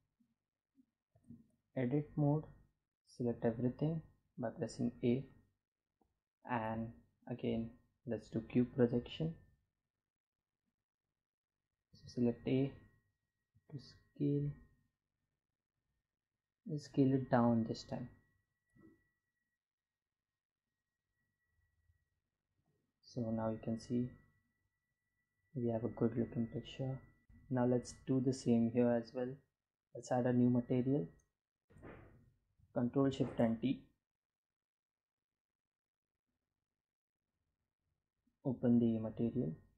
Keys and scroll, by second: 1.6 a, 4.2 u, 10.2 a, 11.8 s, 17.1 Tab, 21.7 Delete, 29.9 g, 31.7 ctrl+shift+t.